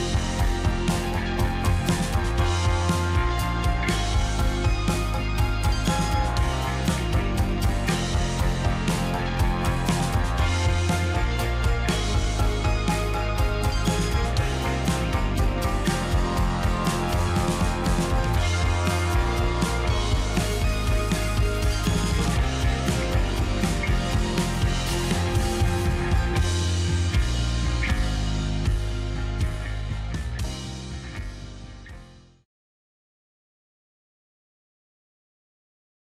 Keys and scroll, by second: 9.1 ctrl+a, 9.4 ctrl+z, 15.4 ctrl+z, 20.5 ctrl+z.